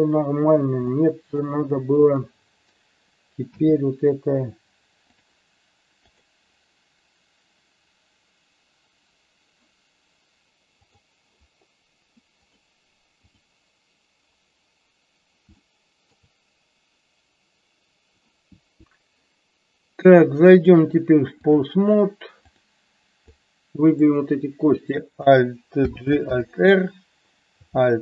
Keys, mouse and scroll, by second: 0.9 middle click, 2.0 click, 3.4 g, 5.1 click, 6.1 click, 10.4 KP_1, 10.8 click, 12.5 click, 15.5-16.2 shift+middle drag, 20.7 click, 22.4-23.2 drag, 23.3-23.9 drag, 25.8 alt+g, 26.2 alt+r.